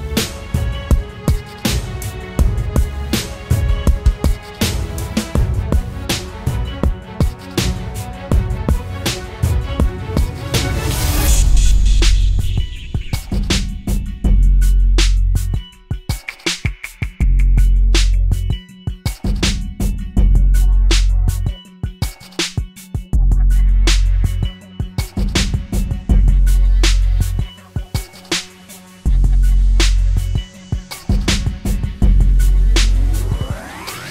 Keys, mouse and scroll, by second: 18.3 ctrl+z, 18.7 ctrl+t, 20.2 alt+shift+click, 25.0 Return, 25.8 ctrl+=, 26.4 alt+scroll up 1, 26.8-27.3 alt+scroll down 1.